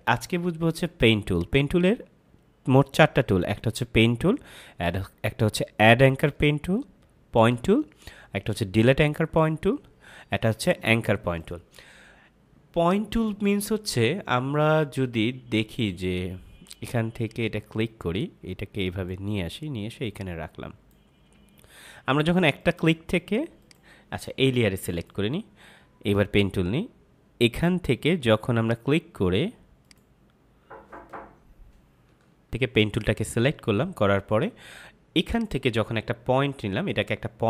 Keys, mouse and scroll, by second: 1.2 click, 28.5 click, 32.8 click.